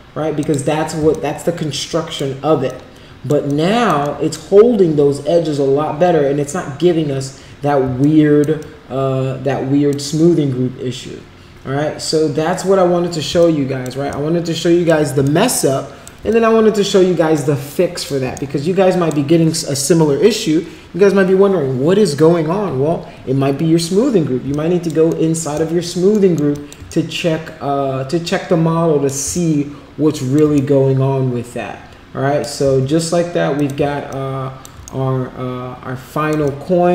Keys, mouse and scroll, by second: 0.3 click, 1.1-2.1 alt+drag, 2.6 alt+click, 3.4 alt+click, 4.2 alt+middle click, 8.0 alt+click, 8.6-9.9 alt+drag, 13.3 alt+click, 14.1 shift+right click, 15.3 shift+right click, 16.2-17.3 alt+drag, 17.6 alt+click, 18.5 shift+right click, 24.4 alt+click, 25.1 alt+middle click, 25.5 alt+click, 26.2 alt+middle click, 26.5 alt+click, 26.9-29.1 shift+right drag, 29.3-30.3 alt+drag, 30.6-32.4 shift+right drag, 33.5 click, 34.1 alt+click, 34.8-36.4 shift+right drag, 36.4-36.9 alt+drag.